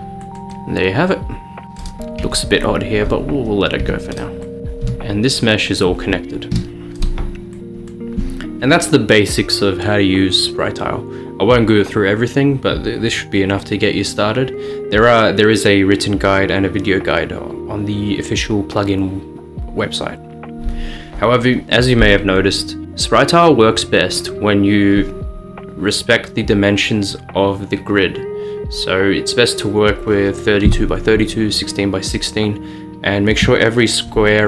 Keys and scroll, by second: 2.3 Tab, 3.9 Tab, 4.9 g, 6.6 Escape, 22.8 Tab.